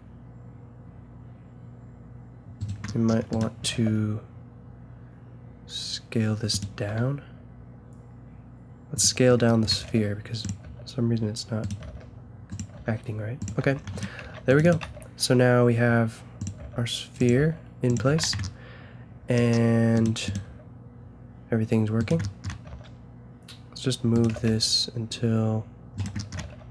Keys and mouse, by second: 2.9-3.3 middle drag, 3.3-5.4 right drag, 3.7 g, 6.9 s, 9.3-11.5 drag, 9.7 g, 10.6 g, 11.8-14.8 typing, 13.9-16.2 drag, 16.5 g, 17.3 g, 18.1 a, 18.4-20.2 drag, 20.5 g, 22.6 g, 24.3 g, 26.4 g.